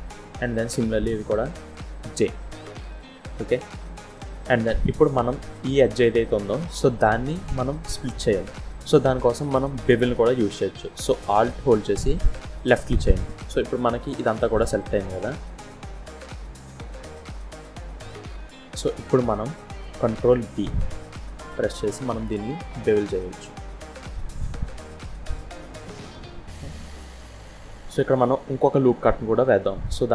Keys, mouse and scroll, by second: 0.0 click, 0.0 j, 2.0 j, 2.7-3.0 scroll down 3, 3.2 middle click, 7.2 middle click, 9.8 middle click, 12.1 alt+click, 14.0 scroll down 1, 14.1 middle click, 18.2 scroll up 3, 18.6 shift+middle click, 21.1 ctrl+b, 25.9 middle click, 27.6 scroll up 1.